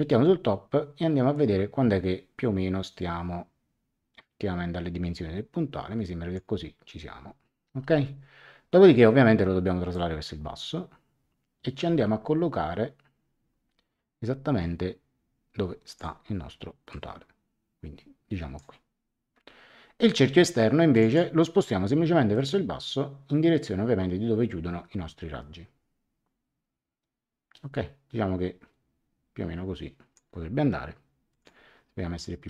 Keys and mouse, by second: 1.3 click, 9.9 click, 16.9 click, 20.9 click, 22.3 click, 31.3 click.